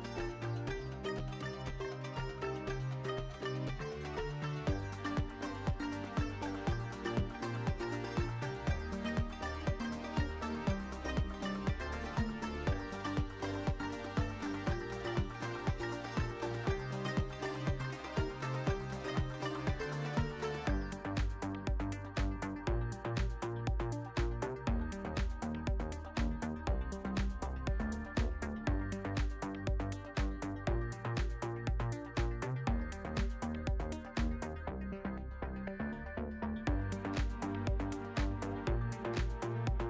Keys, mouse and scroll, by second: 1.3 click, 1.7-2.4 middle drag, 2.9-3.3 alt+middle drag, 4.7-6.0 drag, 10.0-11.3 drag, 14.0-15.0 drag, 15.1 shift+t, 18.5-20.3 drag, 21.7-23.5 drag, 28.8 ctrl+z, 29.1 ctrl+z, 30.3 ctrl+z, 31.9 ctrl+shift+z, 32.2 ctrl+shift+z, 32.6 ctrl+shift+z, 33.0 ctrl+shift+z, 34.1-34.9 drag, 35.0 ctrl+s, 36.8 click.